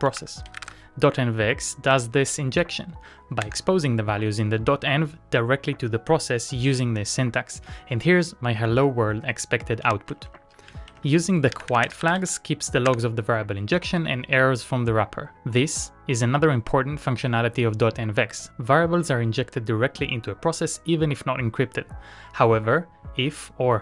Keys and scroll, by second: 0.0-1.1 typing, 3.8 Return, 9.9-12.7 typing, 13.2 Return.